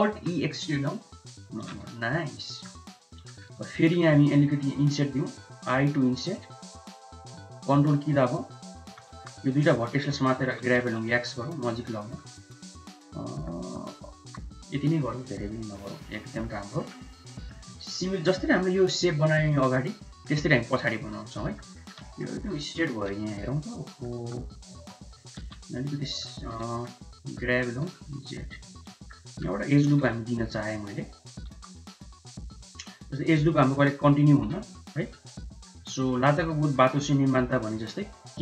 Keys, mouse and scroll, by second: 0.2 alt+e, 1.9 Tab, 2.3-2.7 drag, 3.2 click, 3.5 Tab, 3.9 3, 5.4 i, 9.2 1, 10.5 g, 12.0 middle click, 12.5 Tab, 12.9-13.5 middle drag, 13.7 Tab, 14.3 3, 14.9 Tab, 15.4-16.5 middle drag, 16.6 middle click, 17.4 middle click, 18.0 middle click, 18.4 middle drag, 19.8 middle click, 20.1 middle drag, 20.5 shift+middle drag, 21.0-21.3 middle drag, 21.4 middle drag, 21.8 shift+middle click, 22.2 middle click, 22.3 Tab, 23.2 Tab, 24.0 middle click, 24.3 2, 24.8 Tab, 25.3 middle click, 25.4 1, 26.1 shift+middle click, 26.5 click, 26.8 3, 27.2 click, 27.6 g, 29.0 click, 29.9 ctrl+r, 31.6 1, 32.7 middle click, 33.9 KP_7, 34.9 shift+middle click, 35.4 middle click, 36.0 shift+middle click, 36.3 middle click, 38.0 k.